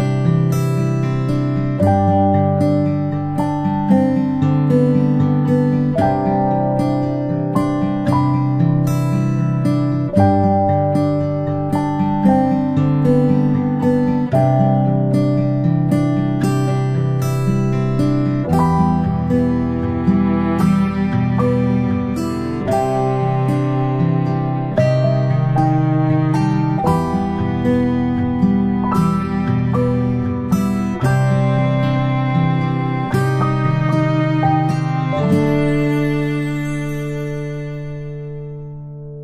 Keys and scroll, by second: 10.9 ctrl+space, 11.1 ctrl+space, 13.0 a, 15.6 ctrl+z, 24.4 g.